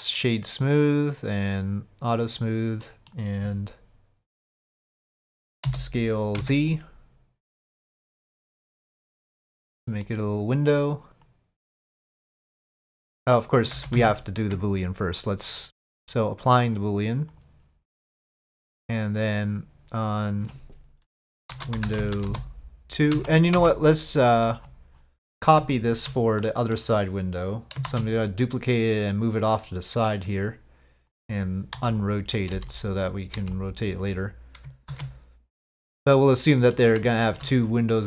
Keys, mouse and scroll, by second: 1.2 click, 2.3 click, 2.8 middle click, 4.4 click, 5.0 middle click, 5.6 s, 10.1-10.7 middle drag, 11.3-13.4 drag, 13.7 ctrl+z, 13.9 ctrl+z, 15.7 Tab, 15.7 click, 16.7-17.4 drag, 19.2 click, 20.0-24.4 drag, 25.7-26.0 shift+middle drag, 26.4 middle drag, 26.6 click, 27.9 shift+d, 29.5 click, 31.1 click, 32.3 click, 33.1 click, 34.9 ctrl+a, 36.4-36.8 middle drag, 37.1 shift+middle drag.